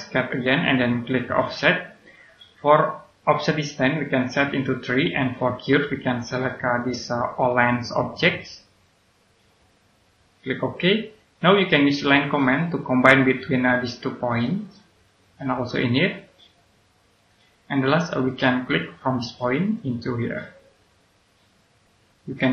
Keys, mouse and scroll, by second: 0.4 click, 6.6 click, 13.0-13.4 scroll up 1, 14.2 click, 17.5-17.8 scroll down 1, 17.8 middle click, 18.2-18.7 scroll up 1, 19.6 click.